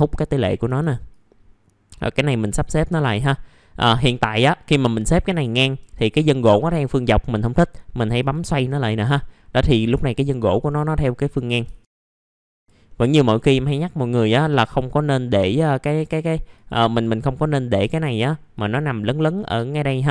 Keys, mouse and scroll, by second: 0.2 middle click, 0.3-0.6 scroll down 1, 1.0-3.5 drag, 3.8 middle click, 5.3-5.7 scroll up 1, 5.7 F4, 8.1 click, 9.3-10.0 scroll down 1, 10.7 click, 11.9 click, 12.6 click, 12.8 middle click, 13.7 click, 14.1-14.6 scroll up 1, 14.6 click, 15.0 scroll down 1, 16.5-19.8 drag, 19.8 click.